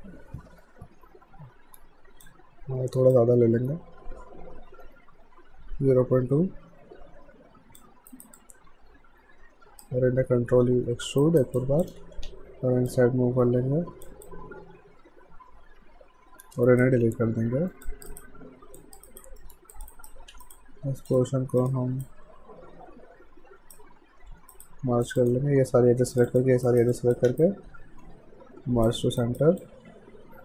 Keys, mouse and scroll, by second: 8.1 alt+right click, 8.4 alt+click, 10.6 e, 11.2 alt+right click, 11.6 click, 12.2 r, 12.9 click, 14.3 click, 17.8 click, 18.1 right click, 18.8 alt+click, 19.1 alt+right click, 19.4 alt+middle click, 19.7 alt+click, 19.9 alt+right click, 20.3 q, 20.5 right click, 21.1 click, 21.6 shift+click, 22.1 shift+right click, 24.3 q, 24.5 right click, 25.1 click, 26.1 shift+click, 26.7 alt+right click, 26.9 alt+click, 27.4 shift+right click, 29.2 alt+right click, 29.6 alt+click.